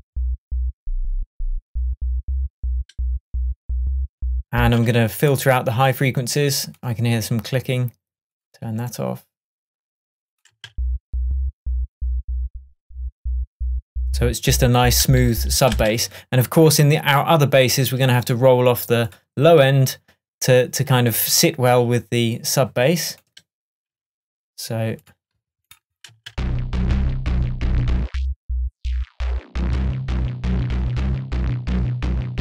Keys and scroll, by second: 4.7 space, 10.6 space, 15.8 space, 26.4 space.